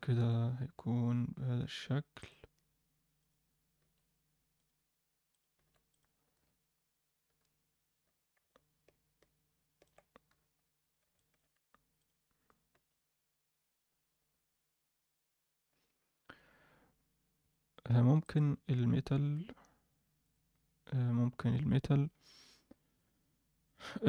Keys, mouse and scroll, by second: 0.2 KP_7, 1.5 g, 3.2 click, 3.7 g, 5.3 click, 5.5 g, 6.3 KP_0, 8.5-9.8 alt+middle drag, 10.2 KP_7, 10.8-11.1 scroll down 1, 11.1 alt+shift+middle click, 12.0 click, 12.7 g, 14.2 KP_0, 18.2 click, 19.2 alt+a, 20.2 click, 22.6 click, 22.9-23.9 drag.